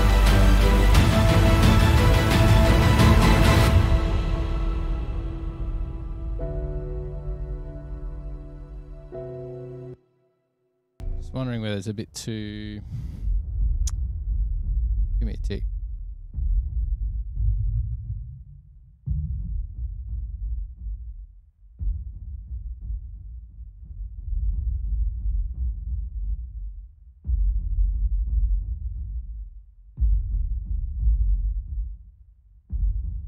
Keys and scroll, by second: 11.8 s, 12.9 super+=.